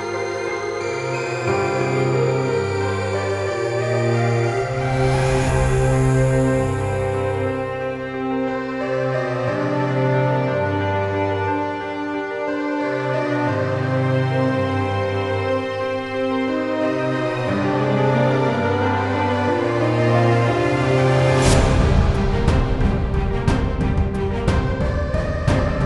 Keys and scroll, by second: 5.1-7.6 typing, 8.0 Return, 17.5-18.9 typing, 18.9 Return.